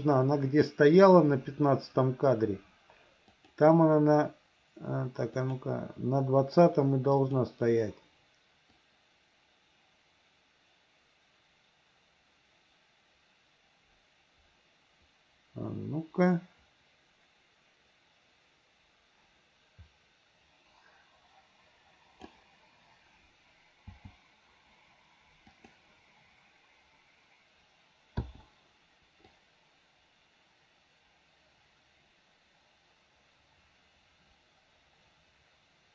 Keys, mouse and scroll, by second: 3.4 click, 5.5 click, 7.2 click, 8.9-22.4 drag, 23.9 g, 28.2 i, 29.4-35.9 drag.